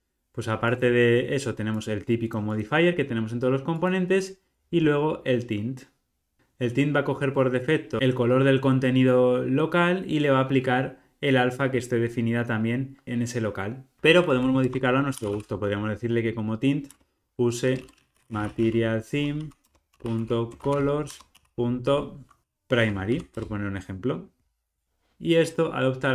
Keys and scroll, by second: 12.5 alt+super+Left, 12.6 alt+super+[, 16.8 Return.